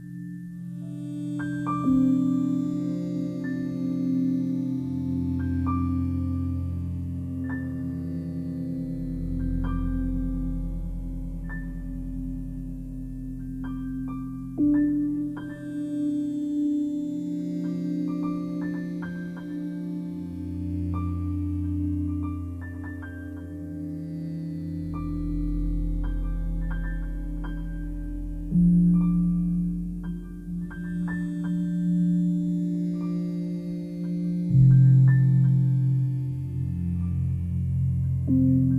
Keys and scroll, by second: 10.1 ctrl+e, 28.7 Return, 30.8 space.